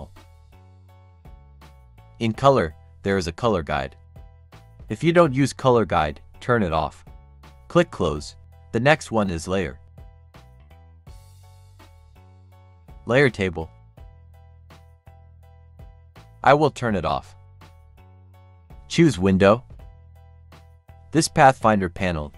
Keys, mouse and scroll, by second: 0.6 click, 3.6 click, 5.5 right click, 7.1 click, 11.8-16.0 drag, 21.1-22.3 drag.